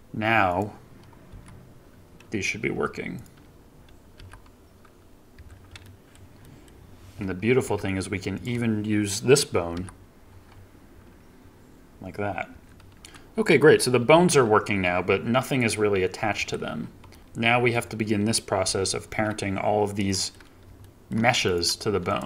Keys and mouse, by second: 1.2 g, 2.6 Escape, 3.1 click, 4.1 g, 5.3 Escape, 5.7-6.0 drag, 6.3 drag, 7.6 KP_3, 8.3 click, 9.7 g, 12.4 Escape, 14.0 g, 16.3 Escape, 17.0 click, 19.0 ctrl+Tab, 20.0 middle drag, 20.7-21.0 shift+middle drag, 21.4 middle click.